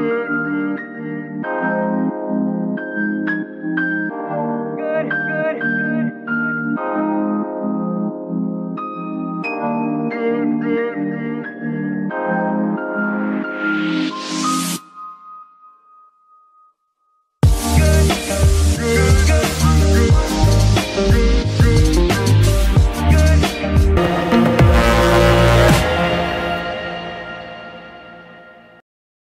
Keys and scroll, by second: 4.9 n, 13.2 ctrl+Tab, 13.4 ctrl+a.